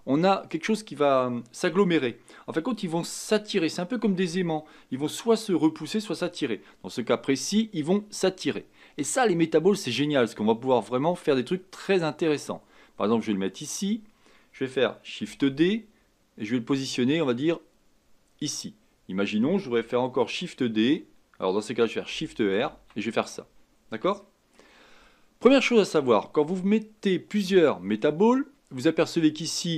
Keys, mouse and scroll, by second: 15.2 shift+d, 18.8-22.1 scroll down 2, 22.1 shift+r, 22.6 shift+r, 23.3-24.2 scroll down 1, 24.2-26.3 shift+middle drag, 26.3 scroll down 1, 26.6 scroll up 2, 28.0-28.6 scroll down 1, 28.6 scroll down 1.